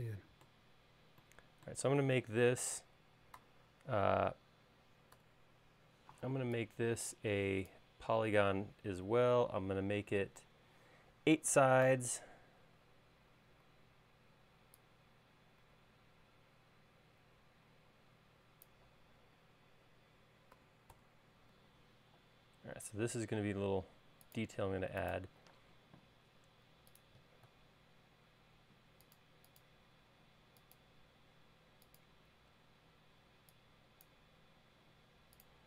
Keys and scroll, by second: 3.5 c, 5.3 p, 9.8 Left, 10.3 Right, 20.7 8, 21.1 Return, 21.7 |, 25.7 space, 33.4 e, 35.1 space.